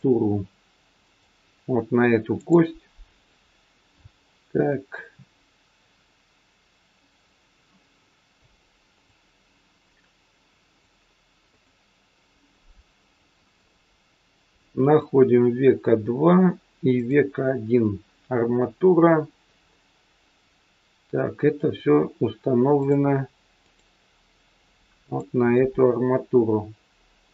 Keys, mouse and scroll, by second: 6.9 click, 8.8 click, 10.7 click, 11.4 click, 13.4 click, 14.8 click, 16.9 click, 21.7-22.8 scroll down 1, 22.8 click, 23.6 click.